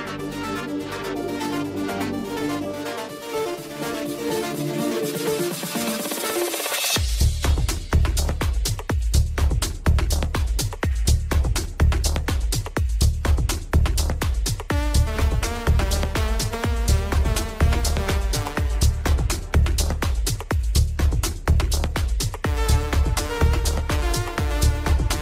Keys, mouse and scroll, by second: 4.8-7.4 drag, 7.4-8.7 scroll down 1, 8.7 click, 9.1-9.9 middle drag, 9.9 scroll down 2, 10.2-10.9 shift+middle drag, 10.9 Tab, 15.2 ctrl+click, 15.6 ctrl+click, 16.1 ctrl+click, 17.8 shift+click, 18.5-20.0 scroll up 1, 20.0 ctrl+j, 20.2-21.4 ctrl+scroll up 1, 21.7 scroll down 1, 22.0 Tab, 22.8 Tab, 23.2-25.2 middle drag.